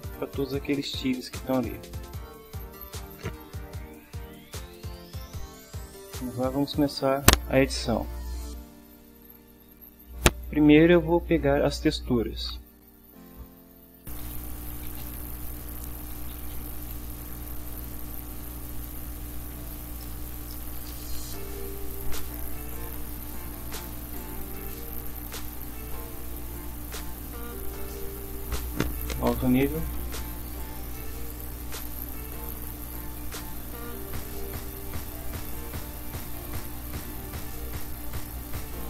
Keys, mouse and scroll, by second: 2.4 click, 9.5 click, 13.8-18.9 typing, 19.1 shift+Home, 19.7 ctrl+shift+End, 20.0 ctrl+shift+Return, 20.3 ctrl+shift+v, 20.5 ctrl+shift+Return, 21.2 v, 21.3 Up, 21.7 Left, 22.0 Delete, 22.1 2, 22.3 Down, 22.5 Left, 22.7 3, 22.8 Down, 23.0 Left, 23.1 Delete, 23.2 4, 25.4 ctrl+s, 29.3 click, 31.6 click, 32.8 click, 35.2 click, 36.2 click, 37.2 click, 38.3 click.